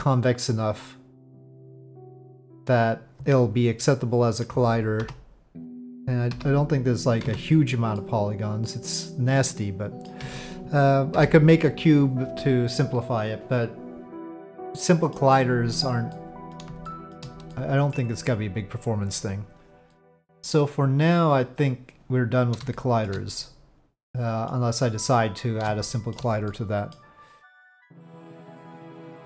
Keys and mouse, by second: 6.3 KP_Divide, 7.2 Tab, 8.0-10.1 middle drag, 10.2 Tab, 12.3 click, 12.8-15.1 middle drag, 16.1-16.5 middle drag, 16.9 shift+middle drag, 17.5-17.9 middle drag, 19.9-21.1 middle drag, 22.7-23.0 shift+middle drag, 23.4-24.5 middle drag, 25.8 shift+middle drag, 26.5-26.9 middle drag.